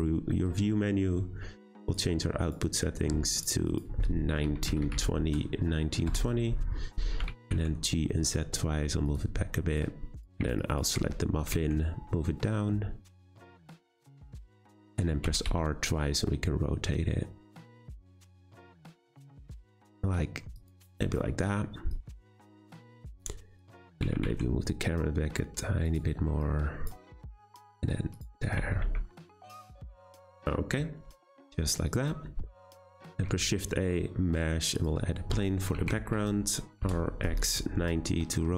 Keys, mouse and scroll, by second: 1.8 click, 2.4-3.4 drag, 3.6-6.7 drag, 7.2 g, 9.8 click, 10.6 drag, 11.5 g, 15.2 r, 21.0 g, 22.2 click, 23.0 click, 23.6 click, 23.9 g, 26.4 click, 27.3 g, 28.6 r, 30.1 click, 30.6-31.9 scroll down 2, 31.9 click, 33.1 shift+a, 35.7 r, 38.1 middle drag, 38.3-38.5 scroll down 5.